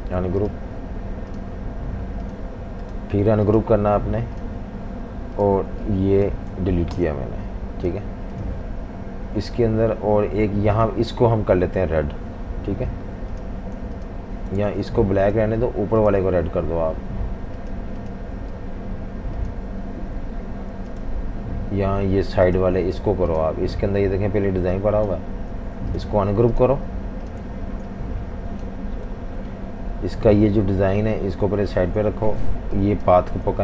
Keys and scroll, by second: 6.9 Delete, 8.0 v, 13.8 v, 14.6 super+z, 18.6 v, 18.7 v, 20.7 super+z, 25.6 super+z, 27.5 z, 27.7 z, 29.1 v, 29.3 v, 31.8 super+z, 32.2 super+3, 33.5 super+z.